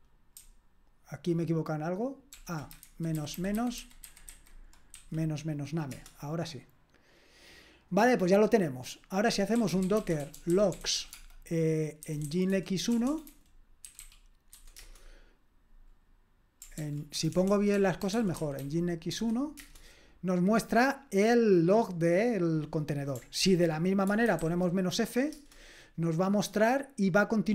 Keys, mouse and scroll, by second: 2.3 ctrl+p, 2.8 alt+b, 3.2 alt+b, 3.3 alt+b, 3.6 alt+b, 3.8 alt+b, 4.0 alt+b, 4.3 alt+b, 5.0 -, 5.9 Return, 9.3-14.8 typing, 16.8 ctrl+p, 17.2-19.1 typing, 19.6 Return, 23.4 ctrl+p, 24.0-24.9 typing, 25.3 Return.